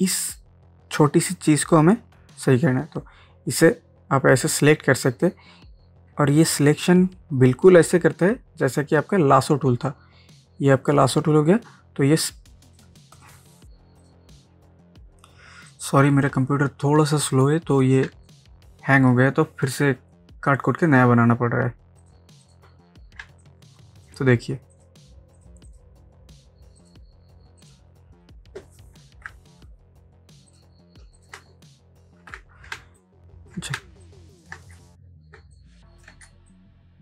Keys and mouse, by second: 3.8-9.9 drag, 9.9-13.1 drag, 14.1-18.1 drag, 18.1 ctrl+space, 18.3 ctrl+click, 18.5 click, 22.0 click, 23.2 ctrl+space, 23.4 ctrl+click, 23.9 ctrl+space, 24.7 click, 29.3 ctrl+j, 30.5 click, 32.2 ctrl+e, 32.8 ctrl+space, 33.0 ctrl+click, 33.3 ctrl+space, 33.8 ctrl+space, 34.0 ctrl+click, 34.4 ctrl+space, 35.5 click, 36.3 ctrl+space, 36.5 ctrl+click, 36.8 ctrl+space.